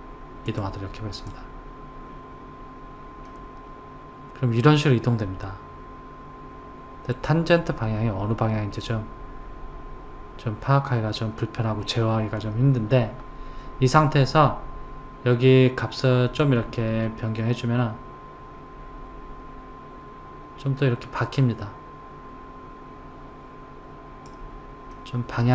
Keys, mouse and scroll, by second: 0.5 click, 3.3-6.3 middle drag, 16.4 click, 24.9-25.5 middle drag.